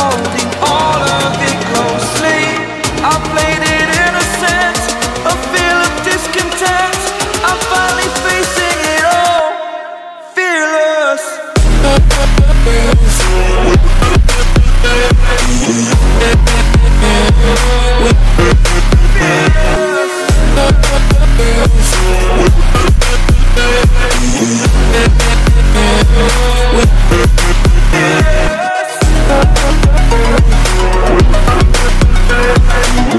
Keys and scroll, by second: 10.6 ctrl+j, 15.2 ctrl+u, 19.7 ctrl+t, 24.4 ctrl+g, 25.8 ctrl+j, 26.3 ctrl+t.